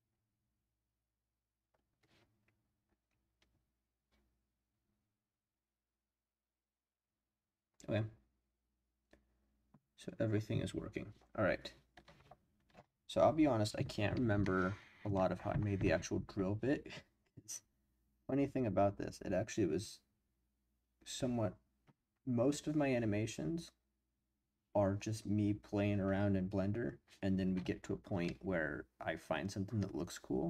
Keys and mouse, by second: 28.2-30.4 middle drag.